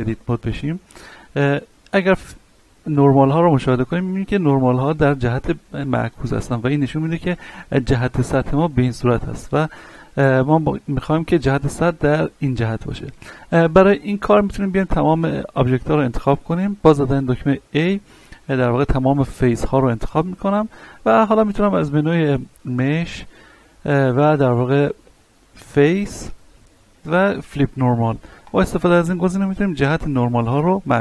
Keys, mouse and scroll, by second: 0.5 scroll down 1, 2.5 click, 3.1-6.6 middle drag, 6.9-8.8 middle drag, 8.8 Tab, 9.2-14.1 middle drag, 14.1 Tab, 14.8 a, 18.2-22.6 middle drag, 22.6 click, 27.0 ctrl+F10, 28.4 click, 29.7-31.0 middle drag.